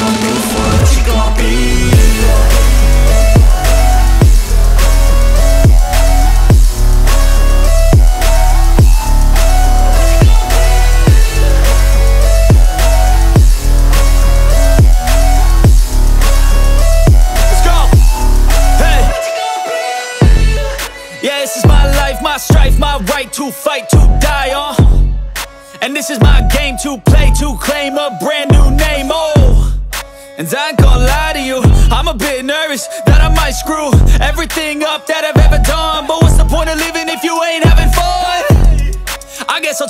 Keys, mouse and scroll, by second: 0.2 shift+click, 0.6 shift+click, 1.4 shift+click, 1.9 shift+click, 2.9 shift+click, 4.3 middle click, 5.3 shift+middle click, 8.8 Tab, 10.0 s, 12.4 click, 12.8 Tab, 14.0-14.8 scroll up 2, 14.8 middle click, 16.1 shift+click, 17.0 shift+click, 17.7 shift+click, 18.2 shift+click, 19.5 shift+click, 20.0 shift+click, 20.5 shift+click, 21.0 shift+click, 22.5 middle click, 23.2-23.9 scroll down 1, 23.9 e, 25.5 click, 25.8 scroll down 1, 26.1 middle click, 26.8 shift+d, 27.5 right click, 28.2 p, 30.5 click, 30.8 middle click, 31.3 Tab, 31.7-32.3 scroll up 1, 32.3 Tab, 33.3 Tab, 33.7 click, 34.4 Tab, 35.4 a, 38.3 click, 38.7 Tab.